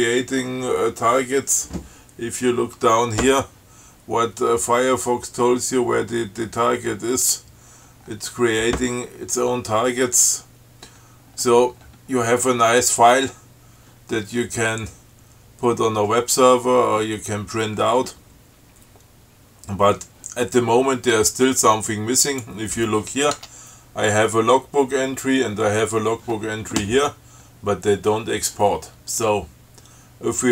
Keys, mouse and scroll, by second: 8.4-8.7 scroll down 2, 9.0 scroll down 2, 9.8-10.1 scroll down 2, 11.1 scroll down 2, 11.5 scroll up 2, 22.5 click, 23.6 Tab, 24.8 scroll up 2, 27.7 scroll down 2, 28.1 scroll up 2.